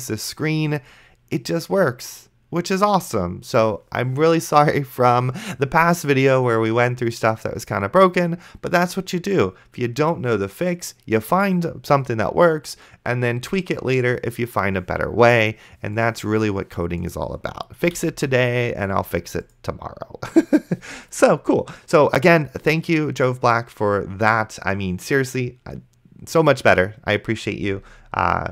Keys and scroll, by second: 18.2 super+Right.